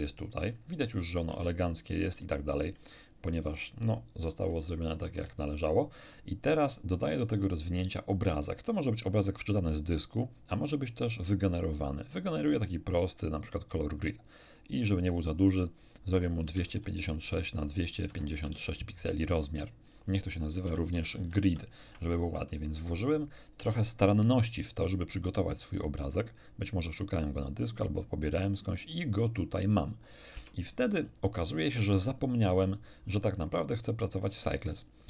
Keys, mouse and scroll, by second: 0.7 middle click, 0.7 scroll up 2, 1.3 a, 1.8 scroll down 3, 2.2 shift+middle click, 4.6 shift+middle click, 10.9 click, 12.0 click, 13.3 click, 14.7 click, 15.8-19.0 typing, 17.3 click, 19.1 click, 19.8 middle click, 20.4-21.8 typing, 27.4 click, 30.3 Tab, 32.7 shift+middle click, 33.4 shift+middle click.